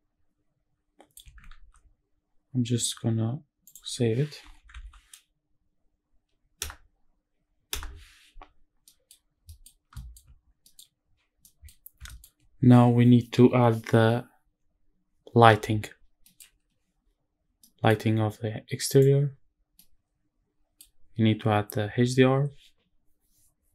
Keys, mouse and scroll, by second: 1.2 ctrl+s, 8.2-8.6 scroll down 1, 8.6 middle drag, 8.8-9.2 scroll down 2, 9.2 middle drag, 9.5 scroll up 2, 9.7 shift+middle drag, 10.1 scroll down 1, 10.4 middle click, 11.2 middle click, 11.8 shift+middle drag, 15.6 scroll down 2, 15.9 middle drag, 17.3 middle click, 18.7 click, 19.4-20.5 middle drag, 20.7-23.6 scroll up 1.